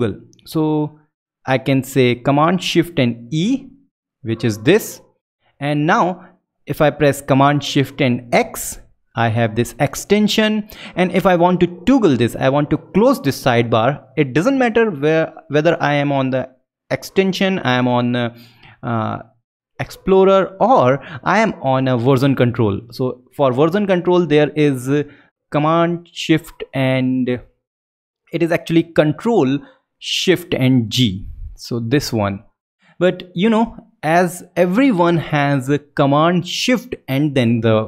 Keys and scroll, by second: 3.2 shift+super+e, 8.1 shift+super+x, 31.3 ctrl+shift+g.